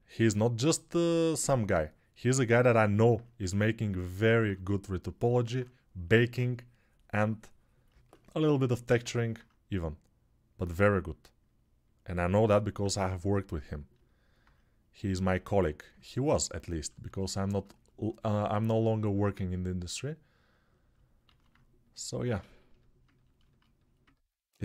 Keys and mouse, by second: 5.0-19.2 alt+drag, 21.3 alt+q.